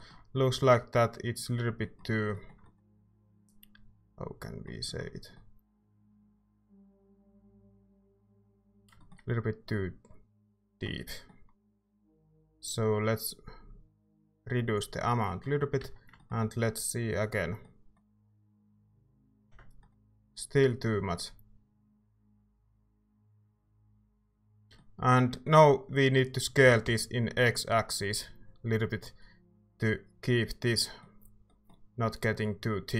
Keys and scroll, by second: 0.5 z, 11.7 ctrl+z, 15.8 Tab, 18.5 Tab, 18.9 z, 21.1 typing, 26.4-27.3 typing.